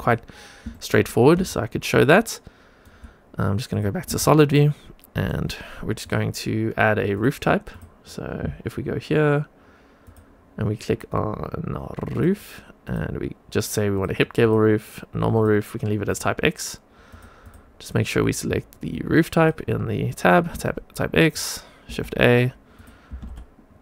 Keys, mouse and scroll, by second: 0.6 shift+middle click, 1.4-2.8 shift+right drag, 3.6 click, 4.1-5.3 shift+right drag, 5.9-7.1 drag, 7.6-17.0 drag, 17.4-19.4 drag, 20.5 shift+right click, 21.9 shift+a, 22.7 click, 23.0 g.